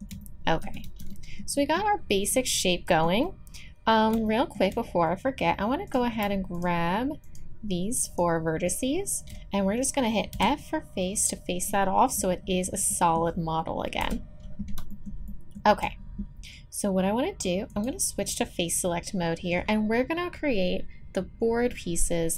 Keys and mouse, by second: 0.8 z, 5.9-10.3 drag, 10.3 f, 11.7-13.7 drag, 14.0 KP_1, 17.2 middle click, 17.7-19.6 drag, 19.5-22.3 middle drag.